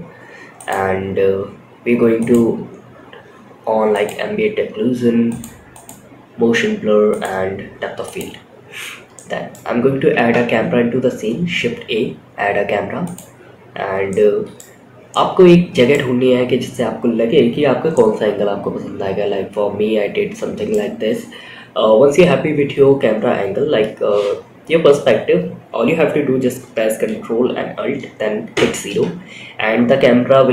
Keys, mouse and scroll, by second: 1.6 click, 3.3 click, 4.6 click, 6.4 drag, 7.4 click, 8.4 scroll down 1, 8.6 middle click, 9.4 shift+a, 13.4-13.9 middle drag, 14.2 scroll up 1, 14.4-15.3 middle drag, 17.3-20.1 middle drag, 27.9 ctrl+alt+KP_0.